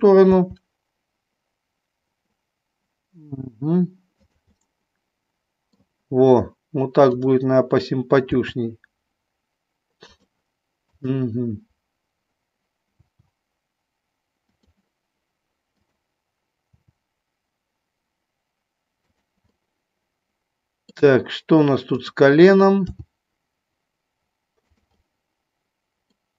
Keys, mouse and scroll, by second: 0.3 r, 4.6-5.8 middle drag, 7.1 click, 8.2 r, 10.1 click, 10.8-12.1 drag, 13.1 r, 14.4 click, 16.7 r, 19.1 click, 19.6-20.9 middle drag, 22.7 g, 24.6 click, 24.9 scroll up 1, 25.2 middle click.